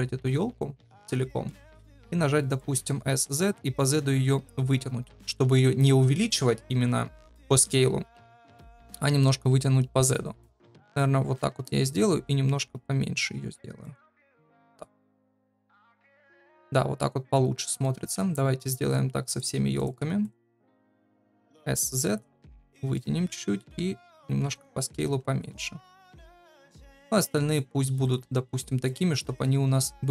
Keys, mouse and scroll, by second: 1.2 middle click, 1.6 shift+middle click, 2.3 middle click, 2.9 s, 8.5 shift+middle click, 10.1 middle click, 11.1 s, 14.7 s, 16.1-17.5 middle drag, 17.7 shift+middle click, 20.6 shift+middle click, 20.9 shift+middle click, 21.4 s, 22.9 middle click, 23.6 s, 24.9 g, 29.2 shift+middle click.